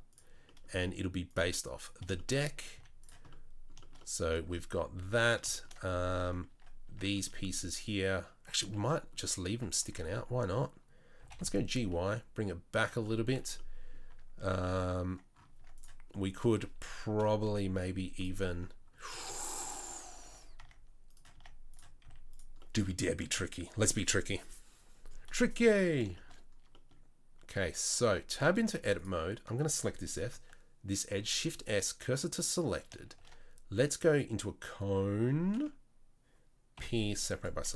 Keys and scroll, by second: 2.7 z, 6.5 Tab, 6.8 Tab, 8.6 Tab, 9.3 Tab, 9.8 Tab, 10.0 Tab, 11.1 g, 13.3 Tab, 14.1 Tab, 14.4 Tab, 15.5 Tab, 17.2 KP_3, 17.7 z, 19.8 Tab, 20.3 z, 21.3 Tab, 22.0 z, 28.0 Tab, 31.1 shift+s, 33.1 shift+a, 36.7 p, 37.6 Tab.